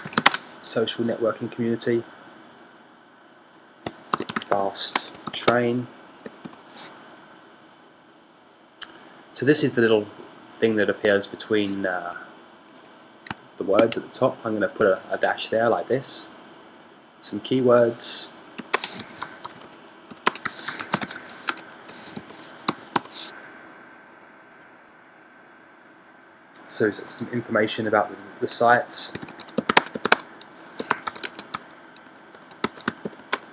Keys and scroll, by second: 1.7 typing, 4.4 shift+f, 6.5 typing, 14.1 shift+\, 19.4 typing, 21.0-23.7 typing, 29.7-33.5 typing.